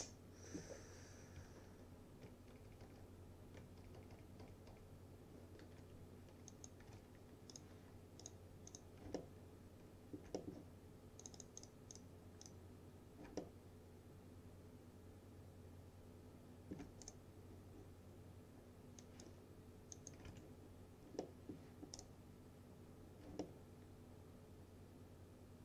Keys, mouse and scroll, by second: 1.7 ctrl+z, 6.6 click, 6.6-7.5 typing, 7.6 click, 9.2-10.7 alt+middle click, 11.3 click, 13.3 click, 13.5-16.9 alt+middle drag, 17.1 right click, 19.1 click, 20.0-20.8 typing, 21.3-21.9 middle click, 22.0 right click, 23.5-25.6 alt+middle drag.